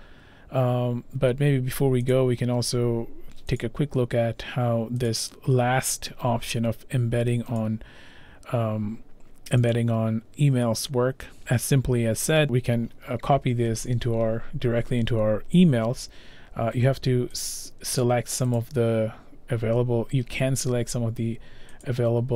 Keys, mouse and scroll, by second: 2.1 click, 3.6 click, 5.1 click, 7.6 click, 17.4 click, 18.0 click, 18.6 click, 20.8-21.8 scroll, 21.8 click, 21.8-22.3 scroll.